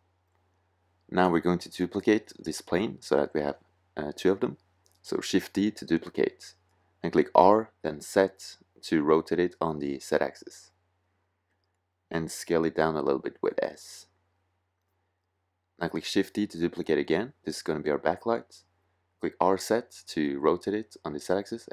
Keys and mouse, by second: 4.0 shift+d, 6.6 r, 10.7-12.5 drag, 12.5 s, 13.2 click, 14.9 shift+d, 15.7 click, 17.9 r, 20.8 s.